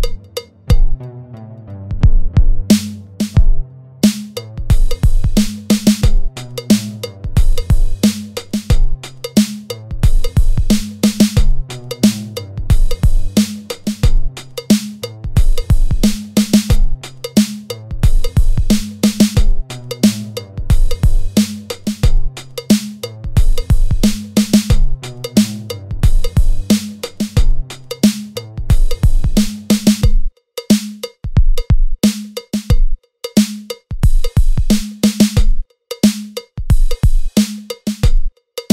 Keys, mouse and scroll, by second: 0.0 shift+middle click, 0.3 click, 0.3 scroll down 1, 0.3 click, 0.6 middle click, 0.6 scroll down 1, 0.7 scroll up 1, 0.9 right click, 0.9 middle click, 0.9 middle click, 0.9 scroll down 1, 1.0 scroll up 2, 1.1 click, 1.2 click, 1.4 middle click, 1.5 Tab, 1.6 scroll up 1, 2.4 ctrl+z, 2.5 click, 2.7 ctrl+b, 2.7 click, 2.9 ctrl+z, 2.9 click, 3.1 ctrl+b, 3.1 alt+click, 3.9 Tab, 3.9 scroll down 1, 4.0 middle click, 4.0 scroll up 1, 4.1 scroll down 1, 4.2 scroll up 1, 4.3 click, 4.4 alt+Tab, 4.4 alt+click, 4.6 click, 4.8 ctrl+b, 4.8 alt+click, 5.4 click, 5.5 alt+click, 5.6 alt+click, 5.7 s, 6.1 Tab, 6.1-6.4 scroll down 2, 6.3 middle click, 6.3 scroll up 2, 6.4 middle click, 6.4-7.0 scroll down 4, 6.5 click, 6.8 click, 7.1 scroll up 3, 7.2 Tab, 7.2 click, 7.6 ctrl+r, 8.2 middle click, 8.3 ctrl+r, 9.0 Tab, 9.1 scroll up 2, 9.3 click, 9.4 alt+click, 9.5 alt+shift+click, 9.8 g, 10.0 Tab, 10.2 middle click, 10.2 scroll down 2, 10.4-10.7 scroll up 2, 10.5 shift+middle click, 10.5 click, 10.8 click, 10.8 scroll down 1, 10.9 scroll up 1, 11.3 click, 11.7 Tab, 11.8 Tab, 11.8 click, 12.3 g, 12.6 click, 12.8 click, 12.9 Tab, 13.1 Tab, 13.2 ctrl+r, 13.6 ctrl+r, 14.0 Tab, 14.0 scroll down 2, 14.1 scroll up 1, 14.3 click, 14.5 click, 14.5 right click, 14.6 click, 14.7 scroll up 1, 15.0 Tab, 15.0 click, 15.1 ctrl+r, 15.6 Tab, 15.6 scroll up 1, 15.8 Tab, 16.2 click, 16.3 scroll down 5, 16.4 Tab, 16.5 click, 16.6 Tab, 16.8 click, 16.8 Tab, 16.8 click, 17.2 Tab, 17.2 click, 17.7 alt+click, 18.0 ctrl+b, 18.5 ctrl+x, 18.7 ctrl+z, 18.7 ctrl+z, 18.8 scroll up 1, 18.9 click, 19.2 alt+click, 19.5 g, 19.7 scroll down 1, 19.8 ctrl+r, 20.2-20.8 scroll down 3, 20.3 Tab, 20.3 middle click, 20.4 middle click, 20.5 click, 20.6 middle click, 20.9 ctrl+r, 20.9 Tab, 21.0 ctrl+r, 21.6 Tab, 21.6 middle click, 21.6 scroll up 2, 21.8 middle click, 21.8 scroll down 2, 22.0 Tab, 22.1 ctrl+r, 22.5 Tab, 22.6 middle click, 22.6 scroll up 1, 22.7 shift+middle click, 22.9 middle click, 23.0 click, 23.4 click, 23.4 middle click, 23.4 scroll down 1, 23.5 scroll up 1, 23.6 middle click, 23.6 middle click, 23.8 click, 23.8 scroll down 1, 23.9 click, 24.1 click, 24.1 scroll up 1, 24.3 middle click, 24.3 scroll down 1, 24.3 Tab, 25.0 click, 25.1 alt+click, 25.2 alt+click, 25.3 click.